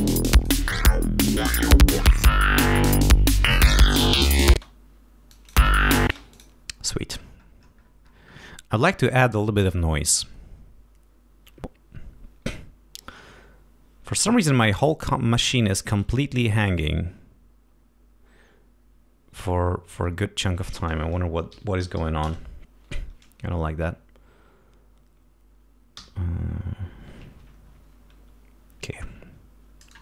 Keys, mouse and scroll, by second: 0.0 click, 0.6 click, 2.0 click, 4.0 click, 19.8 F1, 21.1-22.4 typing, 25.9 t, 27.3 F1.